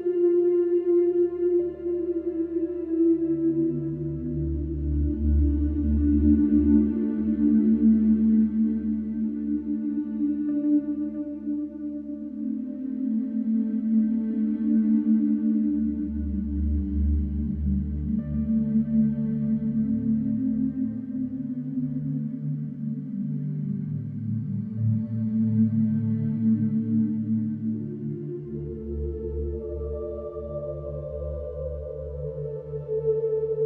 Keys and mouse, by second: 2.8 Tab, 3.5 h, 3.9 h, 4.5 KP_7, 4.8 alt+z, 6.6 Tab, 8.9 shift+click, 10.2 s, 10.4 x, 12.4-14.0 drag, 14.0 ctrl+r, 14.8 shift+r, 15.2 Escape, 15.2 Escape, 15.9 shift+r, 17.1 click, 18.5 s, 18.7 y, 19.4 Tab, 19.4 click, 19.9 alt+z, 20.8 alt+z, 20.9 alt+z, 21.9-23.0 middle drag, 23.0 alt+h, 23.6-25.4 shift+middle drag, 30.2 click, 30.3 shift+i, 30.4 n, 30.4 e, 30.5 r, 30.7 Return, 31.6-33.0 drag, 33.0 shift+o, 33.1 u, 33.2 t, 33.3 e.